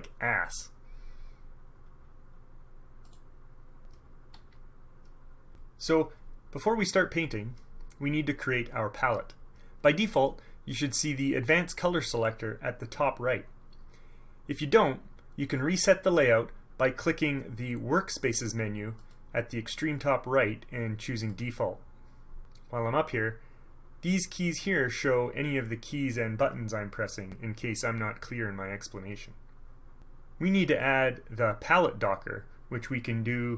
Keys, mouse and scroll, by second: 3.2 click, 4.5 KP_Subtract, 19.1 click, 21.4 scroll up 2, 21.6 middle click.